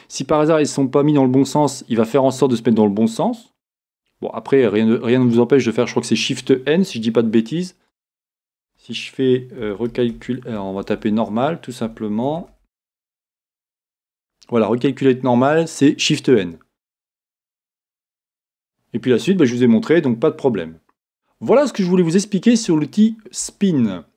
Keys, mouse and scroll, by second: 21.7-24.1 shift+middle drag, 22.9-23.7 scroll down 2.